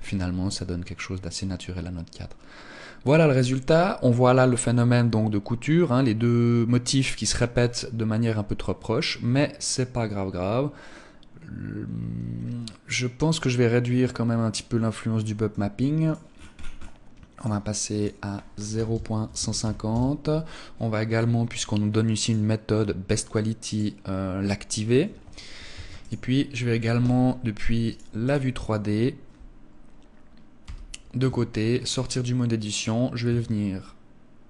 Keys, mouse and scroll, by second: 28.2 click, 30.5 KP_3, 31.1 Tab, 31.5-32.2 scroll down 7, 32.7 right click.